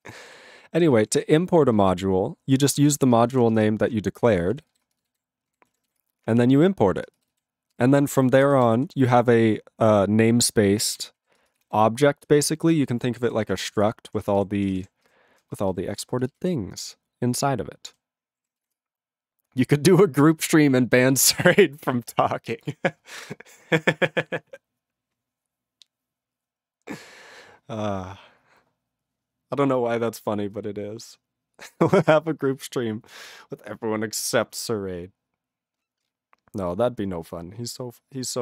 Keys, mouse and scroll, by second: 0.0 ctrl+e, 0.1 ctrl+n, 0.2 ctrl+e, 0.3 ctrl+g, 0.9 ctrl+s, 1.0 ctrl+p, 1.2 ctrl+p, 1.7 ctrl+b, 2.8 ctrl+space, 2.8 ctrl+e, 3.1 ctrl+g, 3.7 Return, 4.2 ctrl+p, 4.2 ctrl+a, 4.3 ctrl+p, 4.5 ctrl+e, 4.7 ctrl+b, 4.9 ctrl+space, 5.2 ctrl+alt+b, 5.5 ctrl+g, 6.0 Return, 6.6 ctrl+b, 6.9 ctrl+e, 7.1 ctrl+space, 7.5 ctrl+alt+b, 7.7 ctrl+g, 8.1 ctrl+a, 8.3 ctrl+n, 8.4 ctrl+space, 8.9 ctrl+alt+f, 11.0 ctrl+g, 11.2 ctrl+b, 11.4 ctrl+space, 11.8 ctrl+alt+b, 12.4 ctrl+g, 12.6 ctrl+space, 13.1 ctrl+alt+f, 13.3 ctrl+g, 13.8 Return, 14.1 ctrl+n, 14.2 ctrl+a, 14.2 ctrl+n, 14.4 ctrl+n, 14.6 ctrl+p, 14.7 ctrl+space, 14.8 ctrl+e, 15.1 ctrl+g, 15.6 alt+b, 15.7 alt+b, 16.3 ctrl+space, 16.5 ctrl+alt+f, 17.9 ctrl+g, 18.7 Return.